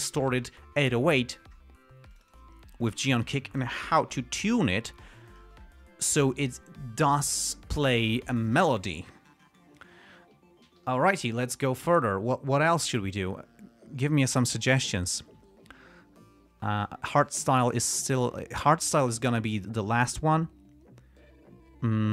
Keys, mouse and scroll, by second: 2.4 click, 3.1 click, 3.9-4.9 typing, 6.4 Return, 11.1 g, 11.4 ctrl+scroll down 2, 12.0 ctrl+click, 13.4 click.